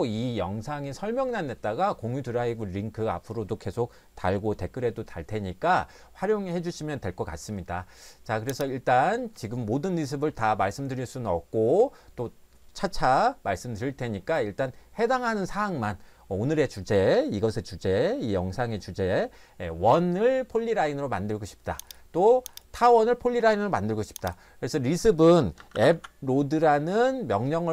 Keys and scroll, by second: 25.3-26.5 typing.